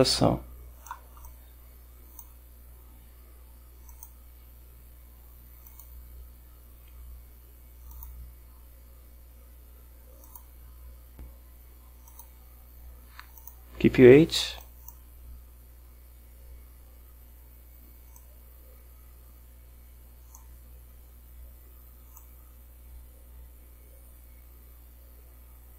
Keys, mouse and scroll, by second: 1.3-2.5 drag, 4.0 click, 5.8 click, 8.0 click, 10.3 click, 12.2 click, 13.5 click, 14.7 click, 18.2-20.6 drag, 22.2-25.7 drag.